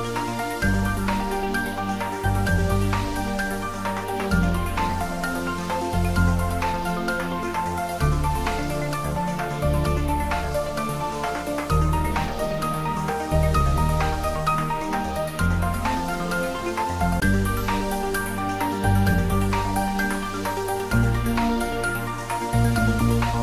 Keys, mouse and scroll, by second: 0.7-2.6 scroll up 1, 3.0 click, 5.9 h, 8.4 click, 12.4-13.2 scroll down 1, 18.8 scroll down 1, 20.4 Tab, 23.3 click.